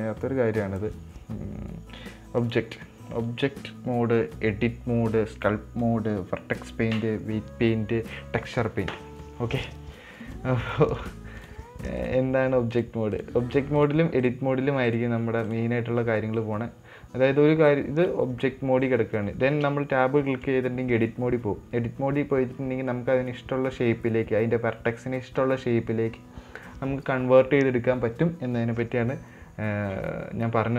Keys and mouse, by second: 0.3 click, 2.9-11.9 drag, 12.5-13.6 drag, 14.1 click, 15.3 click, 20.0 Tab.